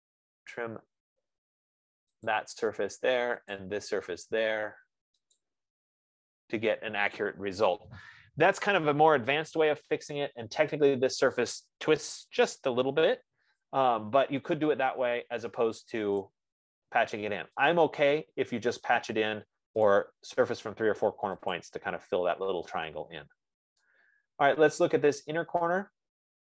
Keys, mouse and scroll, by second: 2.8 click, 4.0 click, 5.9 click, 7.4 scroll, 8.2 scroll down 4, 8.2 Escape, 9.0 Escape, 9.2 scroll, 9.4 Escape, 10.2 scroll, 11.2 click, 15.4 middle click, 16.7 F15, 16.7 right click, 17.2 middle click, 17.5 middle click, 18.1 click, 19.4 click, 20.1 scroll, 20.2 click, 21.9 click, 23.5-24.0 scroll, 25.4 right click, 25.9-26.4 scroll.